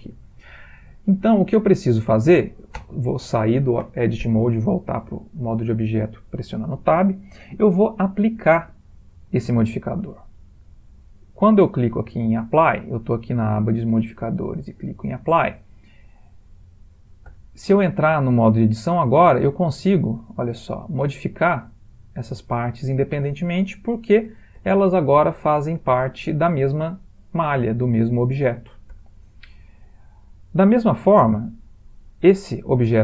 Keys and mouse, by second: 2.8 Tab, 14.7 click, 17.3 Tab, 18.5 click, 19.5 g, 20.5 click, 20.8 g, 21.7 click, 21.8 g, 24.0 ctrl+z, 24.3 ctrl+z, 24.7 ctrl+z, 25.3 ctrl+z, 26.2-26.8 middle click, 26.4 middle click, 27.9 middle click, 28.3 middle click, 28.6 middle click, 29.0 Tab, 30.4 click, 32.3 g.